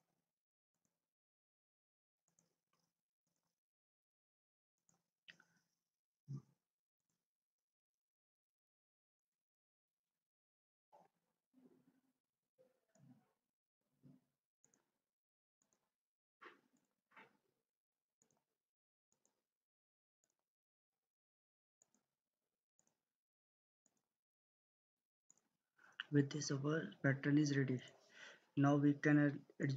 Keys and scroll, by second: 10.7 ctrl+z.